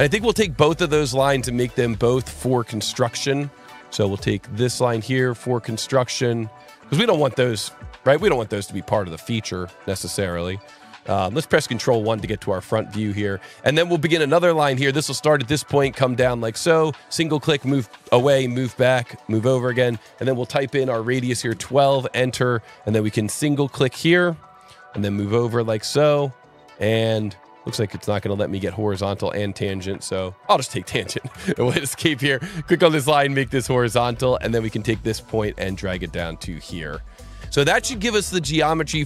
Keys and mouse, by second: 1.1 click, 3.3 click, 4.7 click, 5.7 click, 8.2 click, 9.1 click, 11.1 ctrl+1, 13.1 s, 14.0 click, 14.9 click, 16.1 click, 21.1 KP_1, 21.3 KP_2, 21.5 KP_Enter, 24.5 click, 30.4 click, 31.3 Escape, 32.3 click, 33.4 click, 33.8 Escape, 34.6 click, 37.6 click, 38.8 click.